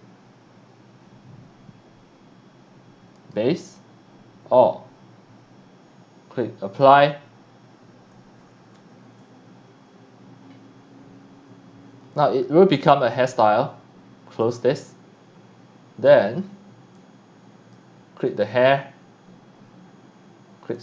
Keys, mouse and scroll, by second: 3.2 click, 6.8 click, 14.4 click, 16.9-17.7 drag, 18.2 click, 20.7 click.